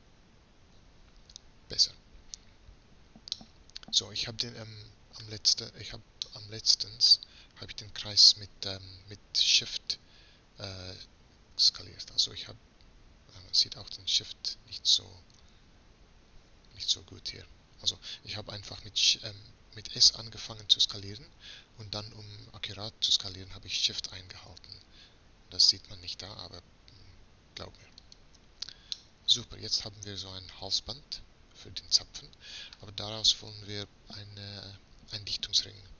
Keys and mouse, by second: 3.4-4.7 drag, 10.1 s, 20.0 s, 29.0-30.7 middle drag.